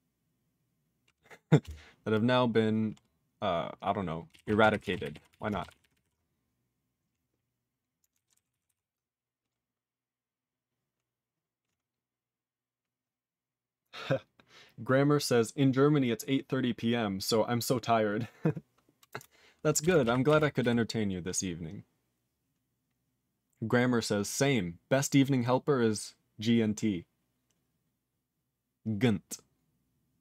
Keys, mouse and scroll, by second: 8.6 4, 19.1 d, 19.8 r, 20.6 t.